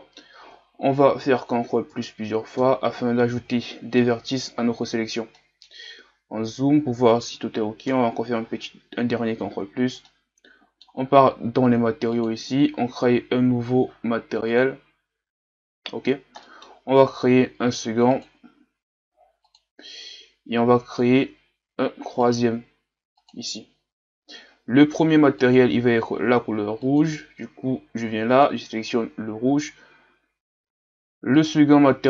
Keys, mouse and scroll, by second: 1.3 ctrl+KP_Add, 1.5 ctrl+KP_Add, 5.5 middle click, 5.9-6.5 scroll up 1, 7.9 ctrl+KP_Add, 9.5-10.1 scroll down 1, 10.1-15.0 middle drag, 15.0-27.0 drag, 28.6 click, 31.4-32.0 drag.